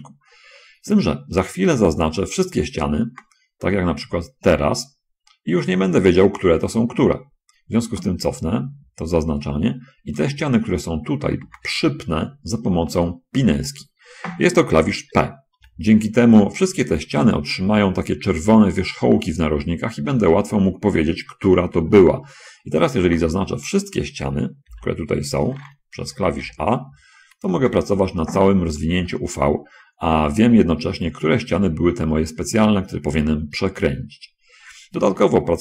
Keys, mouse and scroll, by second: 2.3 middle click, 3.1 shift+space, 4.4 a, 4.6 a, 8.6 ctrl+z, 9.1 ctrl+z, 10.6-11.8 shift+middle drag, 11.8 shift+space, 12.6 middle click, 13.5 shift+click, 16.0 p, 23.4 shift+space, 25.0 p, 26.4 a, 26.8 a, 28.0 shift+space, 29.4 shift+middle click, 35.4-35.6 scroll up 2.